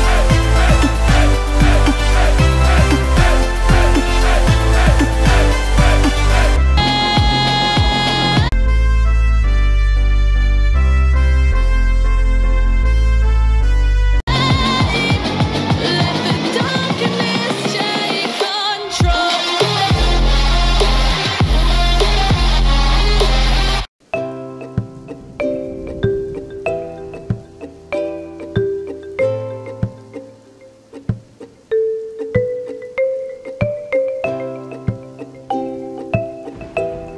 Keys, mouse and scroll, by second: 0.6 KP_0, 1.4-2.0 scroll down 3, 2.0-2.8 scroll down 1, 2.8-3.8 scroll down 1, 3.8 scroll down 1, 4.0-6.8 drag, 6.8 space, 8.5 space, 9.6-14.2 drag, 14.2 space, 24.0 space, 24.7-25.8 scroll up 4, 25.8-26.5 scroll up 1, 26.5-27.8 middle drag, 27.8-28.6 scroll up 1, 28.6-34.8 middle drag, 35.4-36.9 drag.